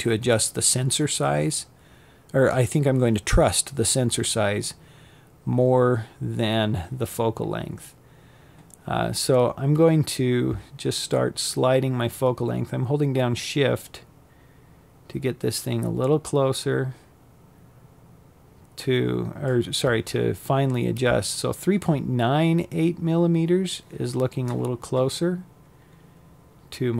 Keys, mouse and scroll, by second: 9.8-21.6 shift+drag, 23.0-23.4 scroll up 3, 23.1 middle click, 24.1-25.9 scroll down 1.